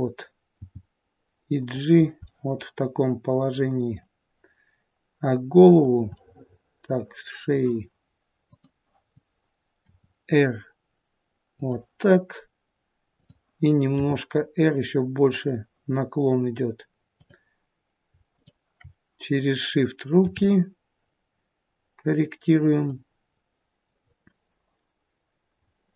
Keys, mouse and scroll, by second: 0.5 g, 2.1 middle click, 5.5 click, 6.1 middle click, 8.5 click, 9.9 r, 13.2 click, 14.0 r, 17.1 click, 18.4 shift+click, 20.2 r, 23.6 click, 23.6 middle click, 25.6 middle click.